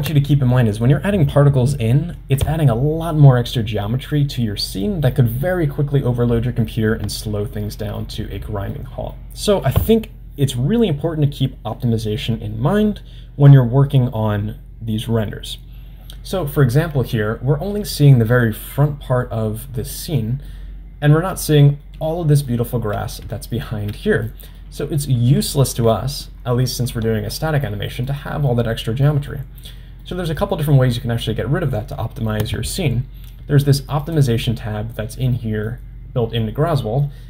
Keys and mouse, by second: 7.3-8.4 middle drag, 8.7-13.3 middle drag, 20.5-21.9 middle drag, 22.8 middle click, 23.5-24.2 shift+middle drag, 24.4-25.6 middle drag, 28.1-28.5 middle drag, 29.1 middle click, 30.1-30.6 middle drag, 34.0 click, 35.5-35.8 middle drag.